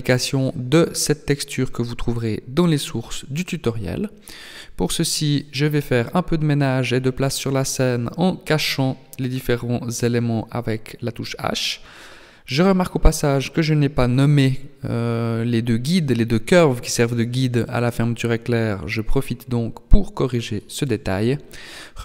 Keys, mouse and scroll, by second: 3.9 middle click, 5.6 right click, 6.2 right click, 7.6 h, 8.2 right click, 8.6 h, 9.5 right click, 9.8 h, 10.5 right click, 12.1 click, 13.8 click, 15.4 click.